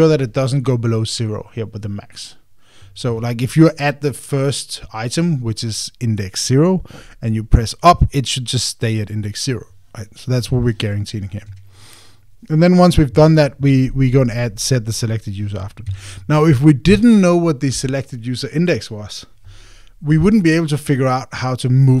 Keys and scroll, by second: 12.3 Escape, 16.6 Escape.